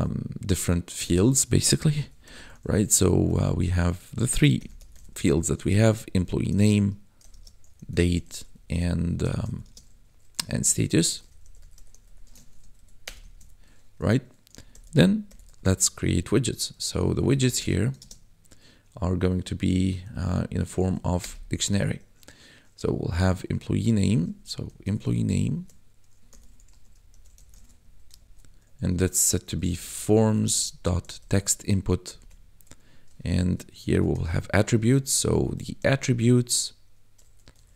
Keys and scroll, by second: 1.9 o, 2.2 y, 2.8 shift+-, 4.5 n, 4.7 m, 4.9 e, 5.5 Up, 6.2 Right, 6.5-11.9 typing, 8.5 Right, 12.4 ctrl+s, 12.6 Right, 13.0 Return, 13.3 ctrl+s, 14.4-16.4 typing, 17.3 Left, 17.5 space, 18.0 shift+space, 20.6 shift+[, 21.2 Return, 24.6-28.2 typing, 27.8 Right, 29.2-31.2 typing, 32.0 Down, 32.2 Tab, 33.3-35.9 typing, 37.1 r.